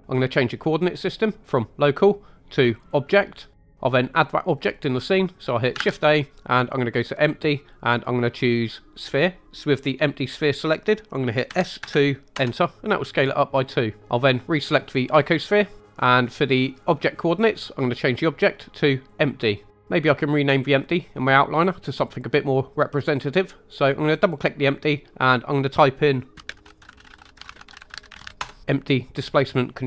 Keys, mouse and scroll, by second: 1.4-2.9 drag, 5.8 shift+a, 11.4 s, 11.8 2, 12.3 Return, 15.0 click, 18.0-19.2 drag, 24.0 click, 24.2-28.3 drag.